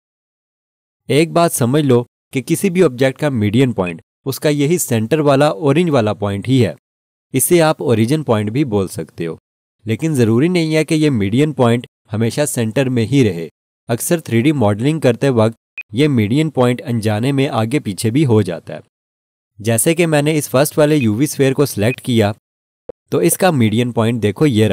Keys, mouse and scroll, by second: 3.8 right click, 15.7 click, 20.0 scroll down 1, 21.4 Left, 21.9 alt+shift+click, 22.7 scroll up 1.